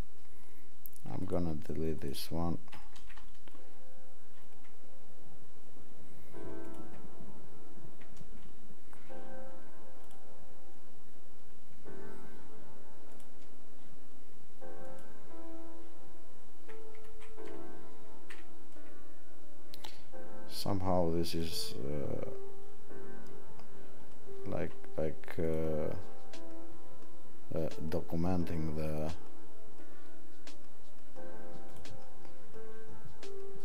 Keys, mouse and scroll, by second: 10.0 click, 13.1 click.